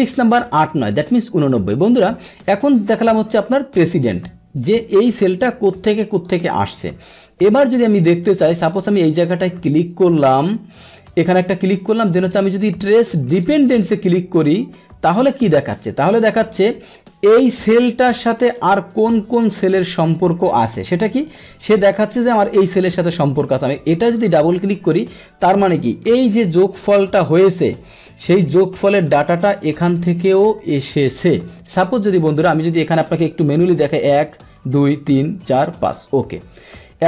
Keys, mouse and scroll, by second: 5.1 click, 6.1 click, 8.7 click, 11.1 click, 13.3 click, 24.0 click, 24.1 click, 25.9 Return, 26.9 click, 27.1 click, 27.9 Return, 27.9 click, 28.5 click, 32.1 click, 33.9 Right, 34.8 Right, 35.1 Right, 35.6 Right, 36.4 Down.